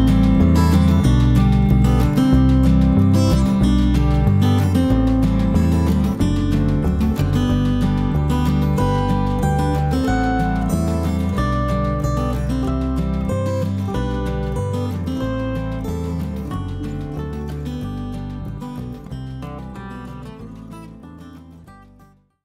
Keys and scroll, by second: 0.6 F1, 1.0 End, 1.4 Page_Up, 2.0-2.5 typing, 5.1 -, 5.5 space, 6.8 ctrl+s.